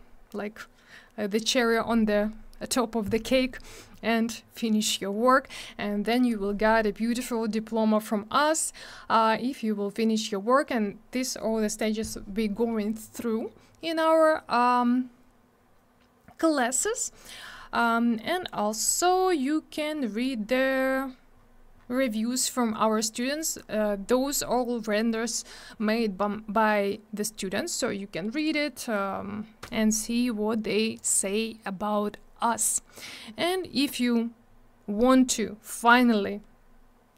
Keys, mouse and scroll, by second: 6.1-6.8 scroll down 3, 13.2 scroll up 1, 16.5 scroll down 1, 17.2 scroll down 1, 20.7-21.0 scroll down 1, 32.1-32.8 scroll down 2.